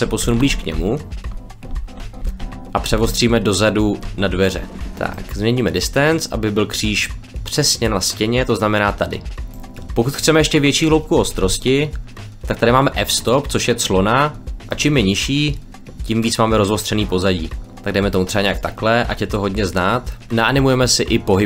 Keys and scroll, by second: 0.1 shift+f, 0.4 w.